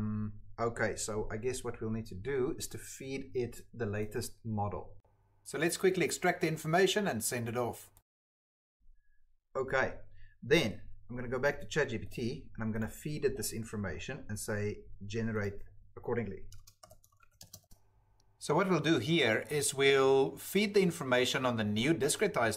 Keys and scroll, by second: 7.0-9.2 typing, 16.3-22.5 typing.